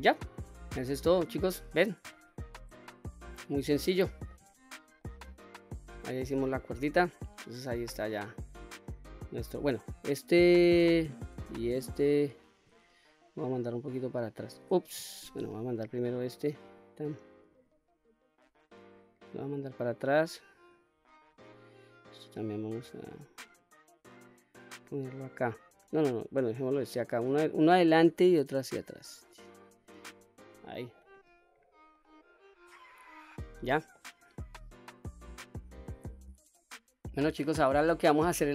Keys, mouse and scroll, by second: 0.4-0.7 scroll down 2, 0.8-1.6 middle drag, 2.2 shift+middle click, 3.0-3.6 middle drag, 4.1 shift+middle drag, 4.6-5.0 scroll down 2, 5.0-9.5 middle drag, 10.5 click, 11.7 shift+click, 13.3 click, 15.3 ctrl+z, 15.8 click, 16.7 click, 17.6 click, 19.1-20.7 drag, 21.4 click, 22.5-27.3 drag, 28.0 click, 29.0 click, 30.2-30.6 scroll down 1, 30.6-31.1 middle drag, 31.2 click, 31.6-32.0 scroll up 2, 32.0-32.7 middle drag, 33.0-33.3 scroll down 1, 33.3-33.9 middle drag, 35.7 ctrl+z, 35.7 click, 35.7 middle click, 35.7-36.6 scroll down 2, 36.6-37.1 middle drag, 37.4-37.8 scroll up 2, 37.8-38.2 scroll down 1, 38.2-38.5 middle drag.